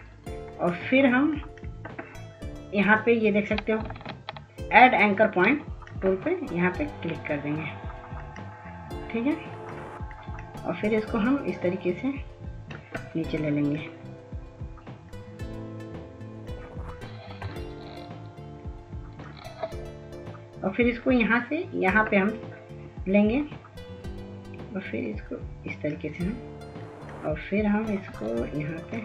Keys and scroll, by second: 2.7 ctrl+s, 3.0 ctrl+s, 3.6 ctrl+s.